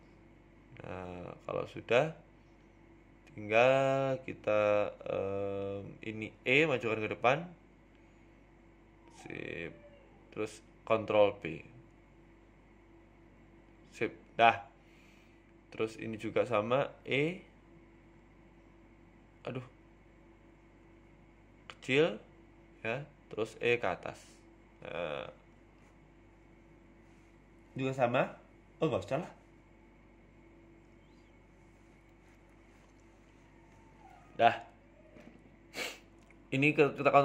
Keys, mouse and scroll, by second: 2.2 Tab, 2.4 middle click, 2.7 middle click, 3.4 KP_1, 3.8 Tab, 5.6 click, 6.4 right click, 7.1 KP_7, 7.7 scroll up 2, 7.8 shift+middle click, 9.3 e, 10.7 scroll up 1, 10.7 middle click, 11.4 scroll down 4, 11.7 ctrl+b, 14.1 middle click, 14.7 scroll up 3, 14.9 middle click, 15.3 KP_1, 15.9 shift+middle click, 16.5 click, 17.7 middle click, 19.3 e, 19.9 s, 25.0 e, 26.1 KP_1, 27.3 shift+middle click, 28.2 click, 30.0 Tab, 30.7 g, 31.7 shift+middle click, 31.9 Tab, 33.3 ctrl+r, 36.8 ctrl+r.